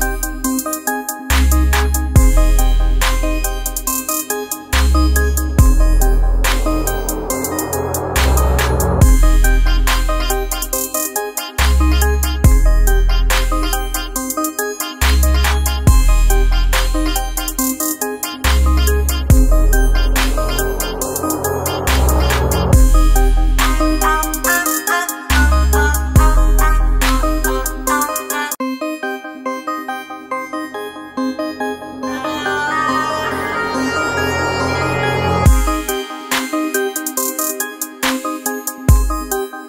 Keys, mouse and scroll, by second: 28.5 F7, 28.6 click, 34.7 click.